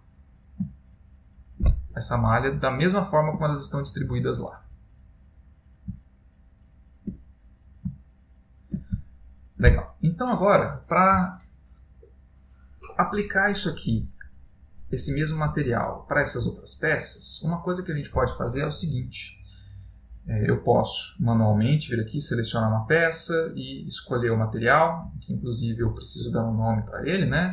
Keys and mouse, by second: 1.1 middle click, 2.1 ctrl+middle click, 3.7 middle click, 6.1 ctrl+middle click, 6.8 ctrl+middle click, 7.3 middle click, 8.1 shift+middle click, 9.2 shift+middle click, 16.7 middle click, 21.7 click, 23.6 click.